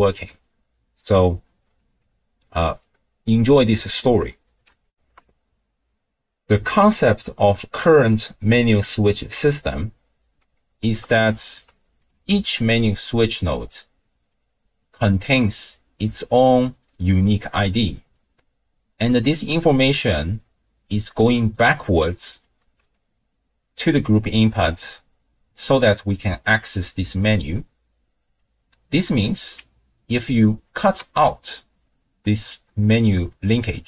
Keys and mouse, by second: 4.9 ctrl+alt+shift+w, 4.9 ctrl+alt+shift+q, 11.1 ctrl+click, 12.0 click, 12.3 n, 14.3-15.3 drag, 20.2 d, 20.7 d, 20.9-21.4 drag, 20.9-21.7 d, 21.7-22.5 drag, 22.4 d, 26.7-28.3 drag, 30.3 ctrl+right click.